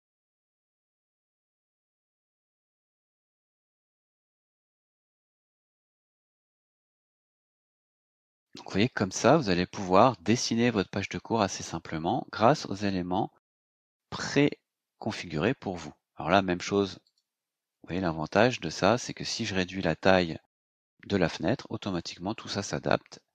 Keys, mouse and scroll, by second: 0.0-3.0 typing, 4.5-5.2 scroll down 4, 5.8 click, 7.3-8.5 scroll down 6, 9.8-10.1 scroll up 2, 11.1-11.9 scroll down 4, 12.6-13.2 scroll up 4, 15.0 scroll down 2, 17.0 click.